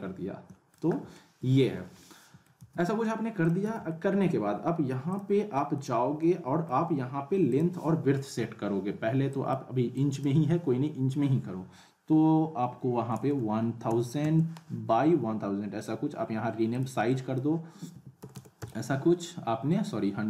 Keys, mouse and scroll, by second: 0.9 scroll up 1, 1.1-1.7 alt+middle click, 1.8 scroll down 1, 2.0-2.6 alt+middle click, 2.6 z, 3.4 click, 3.7 z, 3.9 alt+middle click, 5.1 click, 5.5 middle click, 5.9 scroll up 1, 6.2-6.8 alt+middle click, 7.5 click, 16.7 click.